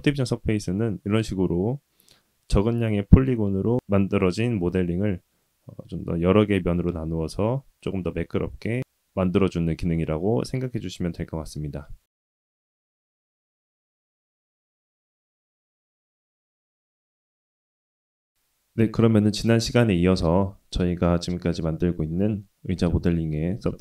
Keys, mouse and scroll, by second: 8.0-8.8 middle drag, 11.0-12.1 middle drag.